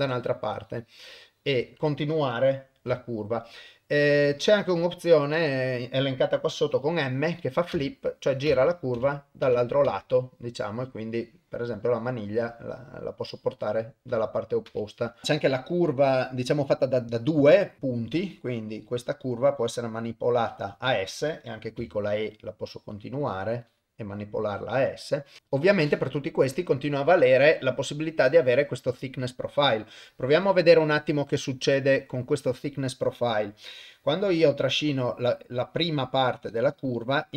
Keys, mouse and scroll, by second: 16.6 click, 17.8-25.4 drag, 25.4 KP_0, 31.3-32.5 drag, 33.6-37.3 drag.